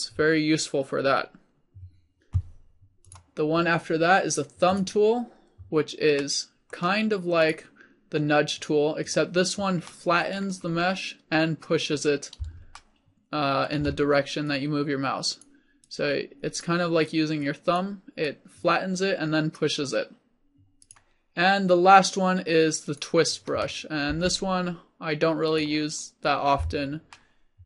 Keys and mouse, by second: 5.0 middle click, 7.6-10.0 drag, 14.6-20.0 drag, 20.2 click, 24.2-25.7 drag, 24.2 f.